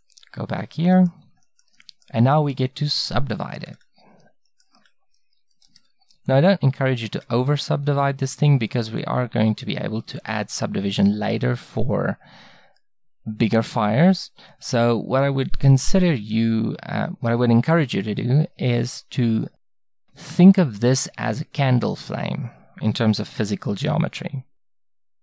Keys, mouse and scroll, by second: 1.0 middle click, 3.6-5.7 middle drag, 5.7 ctrl+r.